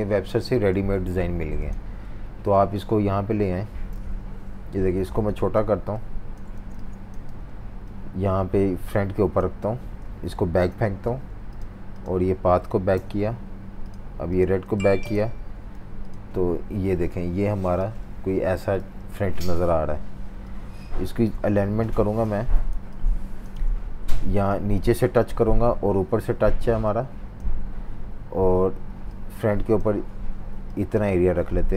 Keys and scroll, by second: 0.7 super+c, 2.5 super+v, 3.9 super+-, 4.0 super+-, 4.7 v, 6.5-7.9 typing, 11.0 shift+super+v, 11.2 typing, 15.7 shift+super+v, 22.7-24.3 typing.